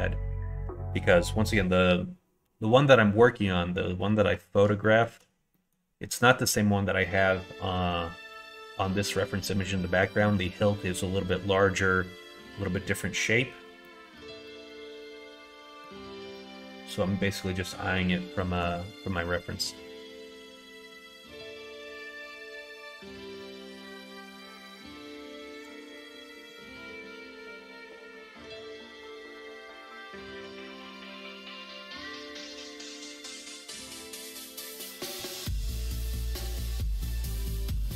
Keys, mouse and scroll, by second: 4.8 shift+middle click, 5.5 middle click, 8.3 click, 9.8-10.2 scroll up 1, 10.2 middle click, 13.8 middle click, 14.4 middle click, 15.0 middle click, 16.3 scroll up 1, 16.4 middle click, 18.4 scroll up 1, 18.5 middle click, 19.0 scroll up 1, 19.1 middle click, 19.9 middle click, 25.6 click, 26.5 middle click, 28.9 alt+click, 29.8 ctrl+b, 32.2 middle click, 32.5 ctrl+z, 34.6 ctrl+b.